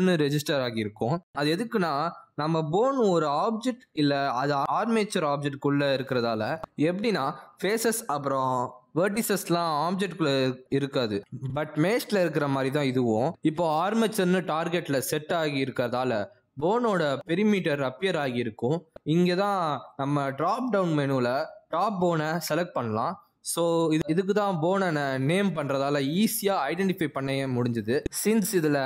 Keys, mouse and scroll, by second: 0.0 r, 1.0 click, 2.2 r, 3.7 click, 7.9 click, 8.6 Tab, 9.5 g, 10.9 Tab, 11.6 ctrl+Tab, 12.0 click, 12.4 r, 14.3 ctrl+Tab, 14.7 click, 25.8 click.